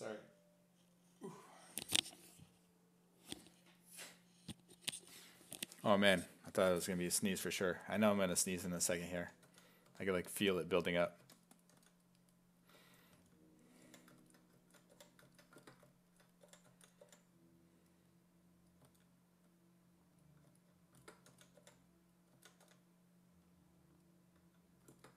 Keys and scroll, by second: 8.0-13.9 typing, 14.9 5, 16.2-17.6 typing, 18.8 s, 21.3 s, 21.6 5, 22.3 s, 22.7 w.